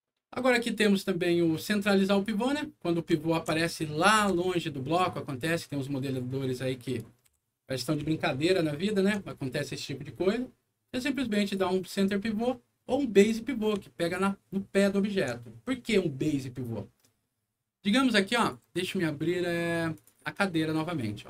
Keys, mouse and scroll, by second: 2.1 click, 3.1 alt+middle click, 3.6 alt+middle click, 4.1 Insert, 4.5 scroll down 1, 5.4 click, 6.6 middle click, 8.2 alt+middle click, 9.7 alt+middle click, 11.4 alt+click, 13.1 click, 13.8-15.2 alt+middle drag, 18.3 click, 19.9 click, 20.8 click.